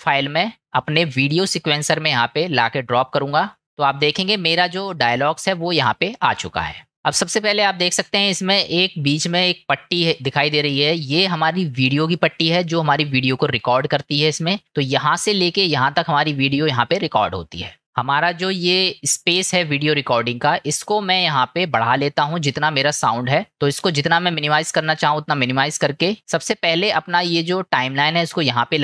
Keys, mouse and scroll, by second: 17.2 middle click, 21.0 middle click, 23.0 middle click, 25.0 middle click, 26.2-28.8 drag.